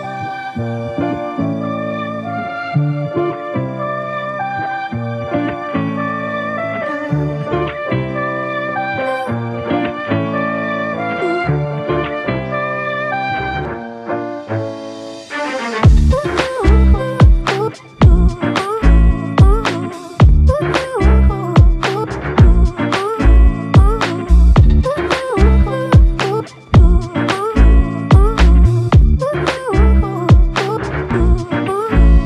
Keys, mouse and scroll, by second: 1.0 ctrl+alt+click, 1.0 ctrl+alt+click, 3.7 ctrl+alt+click, 3.7 ctrl+alt+click, 5.0 alt+shift+click, 5.9 ctrl+alt+click, 7.1 ctrl+z, 7.8 ctrl+z, 15.3 ctrl+alt+click, 26.2 typing, 26.6 Return, 31.7 typing.